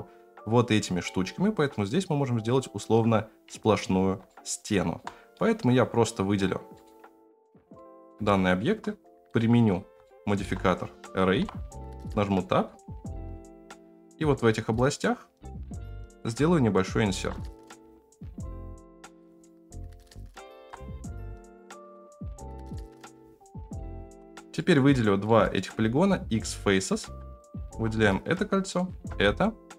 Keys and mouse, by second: 4.3-4.9 shift+middle drag, 6.7 middle click, 7.7-8.1 middle drag, 8.2-8.5 shift+middle drag, 10.0-10.4 shift+middle drag, 11.3 KP_Decimal, 11.9 Tab, 12.3 middle click, 13.7 middle click, 15.9 middle click, 17.7 i, 19.4 middle click, 19.8 f, 20.5 ctrl+z, 21.0 click, 21.5 middle click, 23.0 f, 24.0 ctrl+z, 24.5 middle click, 25.2 middle click, 25.7 x, 26.9 2, 27.3 alt+click, 28.7 alt+shift+click, 29.2 f.